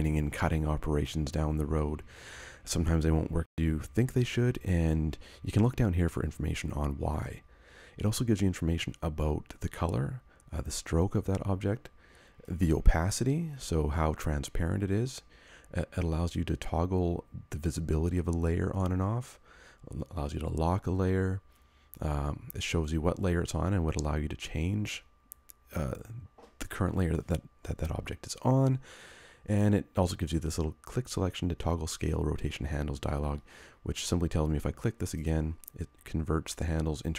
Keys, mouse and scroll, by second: 33.5 click.